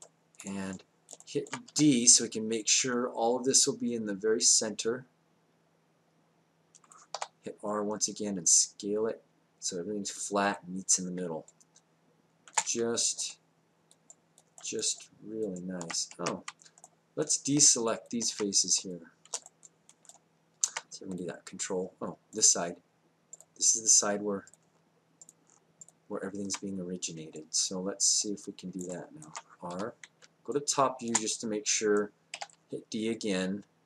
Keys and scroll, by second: 1.7 d, 7.1 r, 11.3 space, 16.1 ctrl+z, 29.7 r, 30.2 space, 32.3 d.